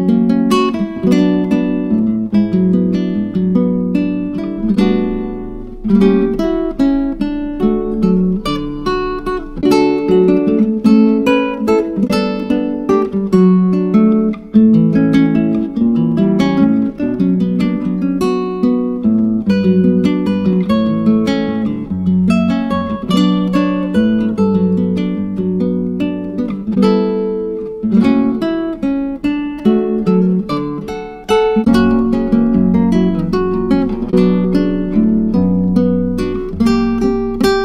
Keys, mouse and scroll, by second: 3.6-6.7 drag, 10.2-14.9 drag, 16.0-20.1 drag, 22.8 click, 28.5 click, 29.2-32.4 drag, 32.5 click, 33.1-33.6 scroll up 2, 33.6-37.6 drag.